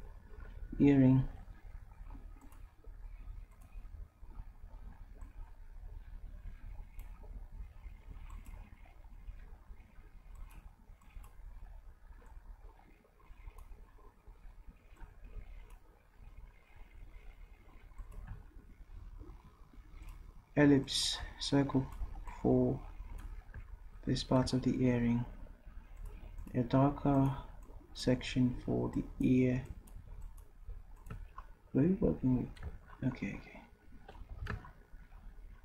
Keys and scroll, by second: 34.4 v.